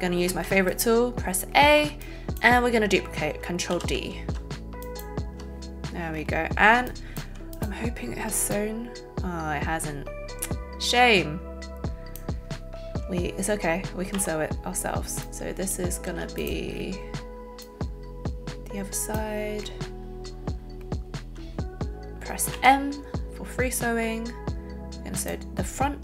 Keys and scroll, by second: 0.2 a, 3.7 ctrl+alt+d, 4.3 ctrl+alt+shift+d, 14.2 m, 22.7 m.